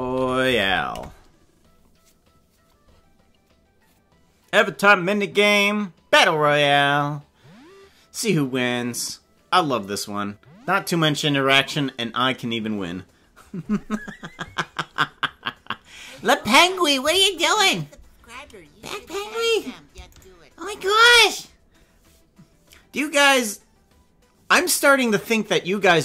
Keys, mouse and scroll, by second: 19.6 right click, 20.3 shift+right click, 20.9 right click.